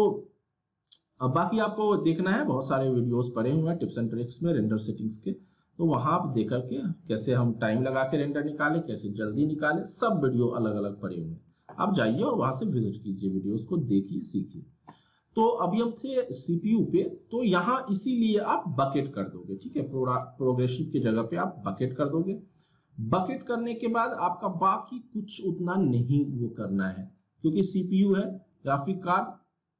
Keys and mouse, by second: 6.1-17.1 drag, 20.7 click.